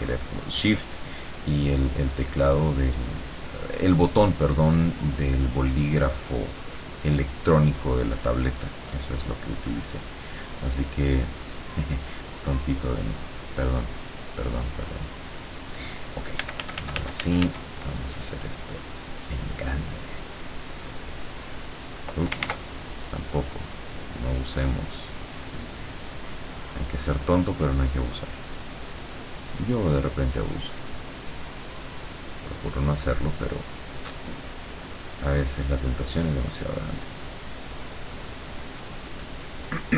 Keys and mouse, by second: 2.2-4.2 drag, 4.2 middle click, 4.4 click, 5.0 middle click, 11.7 click, 13.0-14.1 drag, 16.5 f, 18.6-19.6 drag, 21.5 click, 22.5 ctrl+z, 23.1 click, 24.3 click, 25.3-27.3 drag, 28.1-29.8 drag, 29.9-31.4 drag, 34.7 click, 36.2 click, 36.7 click, 37.3 click, 38.7 click.